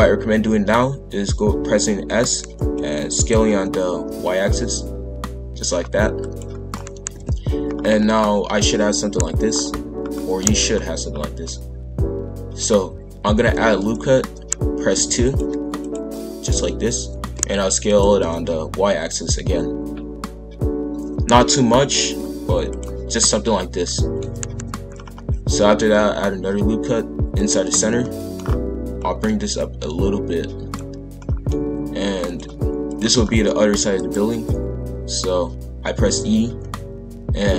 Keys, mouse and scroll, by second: 2.1 s, 3.4 s, 6.7-7.1 scroll down 1, 7.1 KP_1, 7.6-8.3 scroll up 5, 9.5-10.0 scroll down 2, 10.0-10.5 scroll up 2, 11.1-11.4 scroll down 1, 11.4-13.3 middle drag, 13.3 ctrl+r, 17.1 s, 18.1 s, 23.8 middle click, 24.4 KP_5, 24.5 KP_1, 24.9-25.7 scroll up 1, 25.7 ctrl+r, 28.0 middle click, 28.4-28.8 scroll down 1, 29.6 click, 31.2-32.2 middle drag, 32.2 click, 33.2 middle click, 33.7 e, 34.4 click.